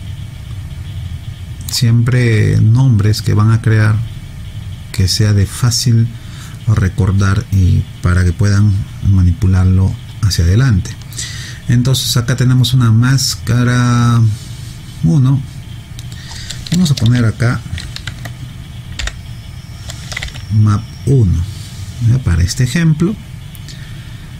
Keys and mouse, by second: 19.0 p.